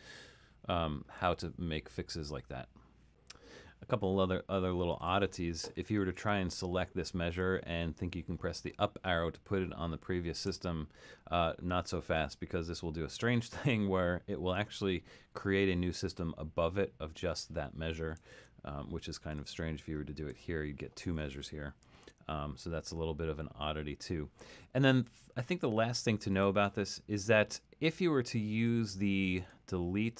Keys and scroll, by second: 10.5 Up, 18.4 super+z, 20.4 Up, 22.0 super+z.